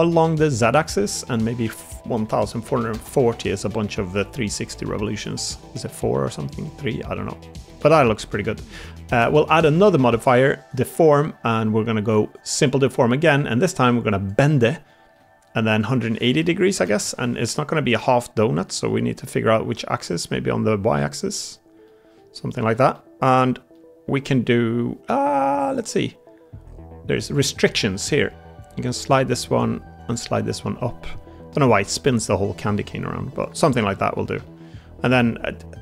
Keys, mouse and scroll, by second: 4.1 middle click, 4.7 middle click, 5.5 middle click, 6.0 Tab, 7.0 Tab, 7.6-8.0 middle drag, 10.1-14.8 drag, 14.8 shift+middle drag, 17.8 middle click, 21.7 middle drag, 22.3-22.6 shift+middle drag, 22.8 middle click, 23.6-24.1 middle drag, 33.8 middle drag, 34.3 shift+middle drag.